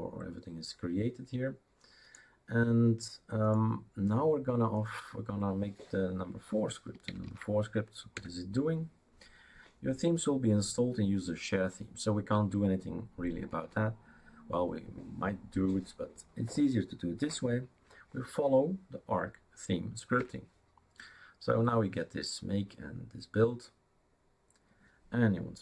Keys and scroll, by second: 7.3-8.1 typing, 13.6 Tab, 20.2 Return.